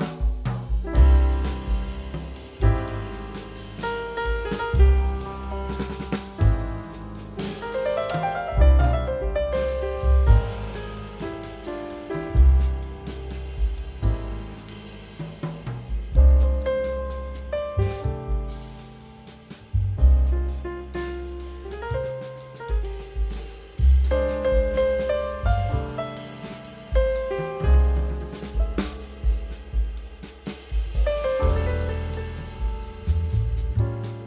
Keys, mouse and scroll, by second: 3.8 right click, 5.5 F12, 10.5 double click, 11.8 typing, 12.2 Caps_Lock, 13.2-14.7 typing, 22.6 q, 23.4 scroll up 1, 24.0 q, 26.0 scroll down 1, 26.6-27.3 typing, 28.2 double click, 30.1 scroll up 1, 33.8 scroll down 1.